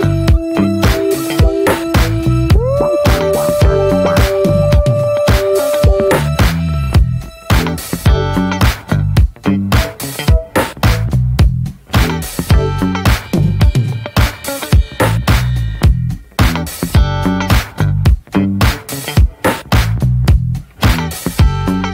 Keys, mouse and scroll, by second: 0.0-8.6 shift+middle drag, 9.2-10.9 middle drag, 10.9 Tab, 11.1 click, 11.5 click, 12.1-14.3 right drag, 14.7 Tab, 15.0-16.5 middle drag, 16.5 click, 17.2 Tab, 17.5 click, 17.9 ctrl+a, 18.9 Tab, 19.3 a, 21.4 Tab.